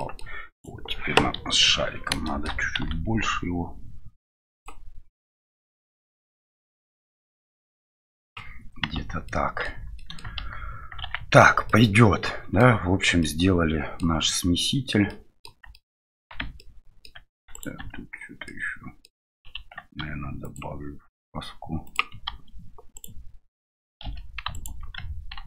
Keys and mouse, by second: 0.0 middle click, 0.5 right click, 1.4 KP_1, 2.2 shift+middle drag, 5.3-8.5 drag, 8.9 Tab, 9.2 middle click, 9.8 Tab, 9.9 middle drag, 10.3 shift+z, 11.0 shift+z, 11.6-12.6 middle drag, 13.2-14.0 middle drag, 15.1 middle click, 15.7 shift+middle drag, 16.4 Tab, 16.5 middle click, 17.1 Tab, 17.5 right click, 17.8 Tab, 18.4 middle click, 20.0 ctrl+r, 24.0 2.